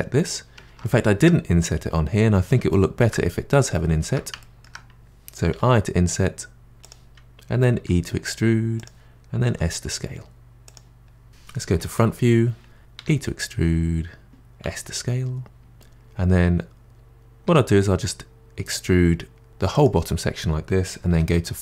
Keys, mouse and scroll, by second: 0.8-5.5 middle drag, 5.5 i, 7.7 e, 9.5 s, 11.2-11.6 scroll down 2, 11.6 middle click, 11.7 KP_1, 13.0 e, 14.7 s, 17.5 e, 21.1 3.